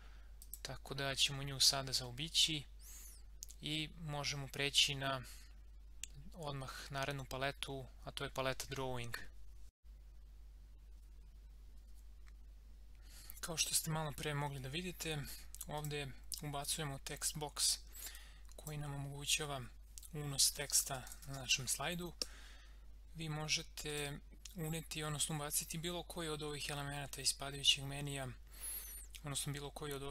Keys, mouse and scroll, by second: 0.4 click, 9.8 click, 15.7-20.5 drag, 20.2-22.2 typing, 23.9 click.